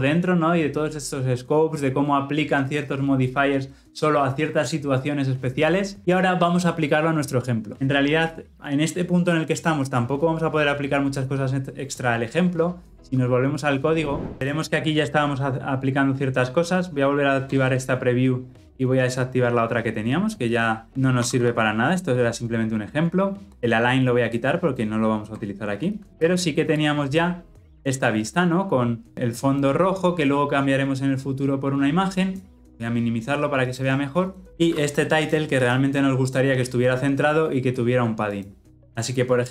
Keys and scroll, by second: 33.7 ctrl+-.